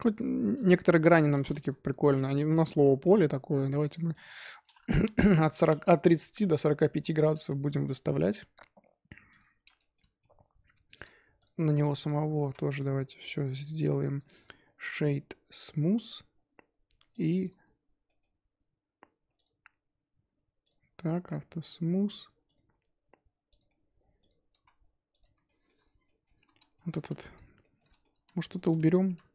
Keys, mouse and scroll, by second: 1.1-2.1 drag, 2.1-2.7 middle drag, 2.7-3.7 scroll down 2, 3.7 click, 4.1 click, 4.4-5.7 drag, 6.1-7.8 shift+middle drag, 7.8 click, 9.3 click, 9.7-11.3 middle drag, 11.3 click, 11.8 click, 12.2 shift+middle drag, 12.4 z, 12.7-13.1 drag, 13.7 z, 14.1-17.1 right drag, 17.1 click, 17.4 click, 18.0-18.8 middle drag, 18.8-19.3 scroll up 3, 19.3 click, 20.6 click, 21.1-21.6 shift+middle drag, 21.6 click, 22.4 click, 23.5 click, 24.0 scroll down 2, 24.2 click, 24.5 z, 25.1 click, 25.4-26.9 shift+middle drag, 26.9 scroll up 1, 27.1 Tab, 27.6-28.6 shift+middle drag, 28.6-29.0 scroll up 1, 29.0 3.